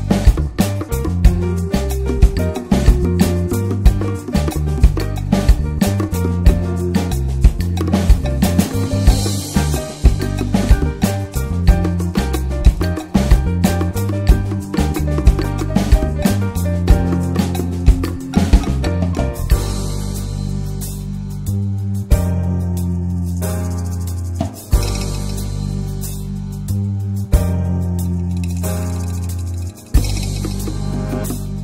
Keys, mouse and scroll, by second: 0.8-1.5 scroll down 3, 1.5 drag, 1.7-2.3 middle drag, 2.3-3.3 scroll up 1, 3.3-3.9 scroll up 1, 3.9-4.3 drag, 4.3-4.9 scroll down 3, 4.6 click, 4.9 middle click, 5.1 click, 5.3 shift+middle click, 5.4 scroll up 2, 5.6-8.1 shift+middle drag, 8.1 ctrl+s, 10.7-11.4 drag, 14.3 click, 14.9 click, 16.2-16.7 drag, 18.9 drag, 19.2-19.6 middle drag, 19.6-20.4 scroll up 1, 20.4-22.4 drag, 22.4-23.3 scroll down 2, 23.3 click, 24.2-25.9 drag, 26.3 middle click, 26.5-27.6 scroll up 1, 29.1-30.3 drag, 30.3 middle click, 30.5-30.9 scroll up 1, 30.9-31.2 shift+middle drag, 31.2-31.6 scroll up 2, 31.4 middle click.